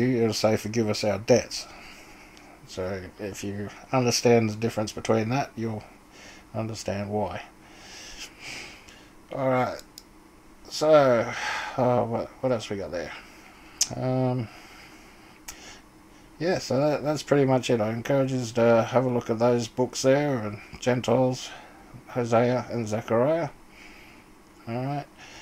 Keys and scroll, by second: 24.0-25.3 typing.